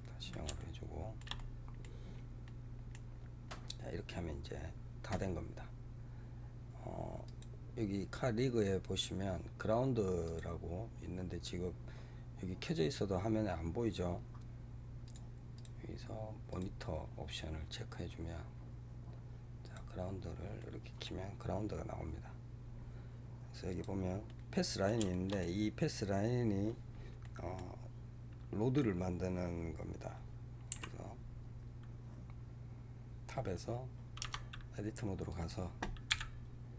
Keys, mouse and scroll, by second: 3.0-3.8 scroll down 2, 7.1 click, 10.1 click, 14.9 click, 15.4-18.4 drag, 19.7 click, 20.5-21.6 middle drag, 21.6 scroll down 1, 22.5 scroll down 3, 23.6 click, 24.2-30.2 middle drag, 30.6 KP_7, 31.3 scroll down 2, 32.4-34.1 scroll down 2, 34.1 Tab, 35.2 click, 36.0 g.